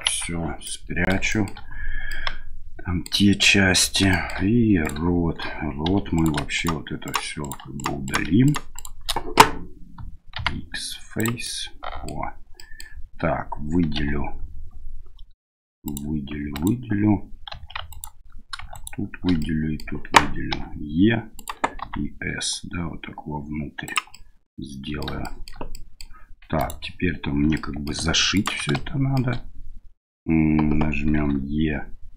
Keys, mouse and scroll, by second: 0.1 KP_Divide, 0.6 middle click, 1.3 shift+middle click, 2.1 middle click, 3.4 middle click, 4.1 shift+middle click, 4.8 right click, 5.9 3, 6.1 right click, 6.5 right click, 7.0 right click, 7.4 right click, 7.7 right click, 8.0 right click, 8.4 right click, 8.7 right click, 10.3 x, 11.4 middle click, 12.5 middle click, 13.9 3, 15.8 right click, 16.5 alt+right click, 17.5 2, 17.9 alt+right click, 18.7 alt+shift+right click, 19.4 middle click, 20.5 e, 21.8 s, 24.2 middle click, 25.2 shift+middle click, 25.8 middle click, 26.6 ctrl+right click, 27.5 middle click, 28.3 ctrl+right click, 28.8 shift+middle click, 31.2 e.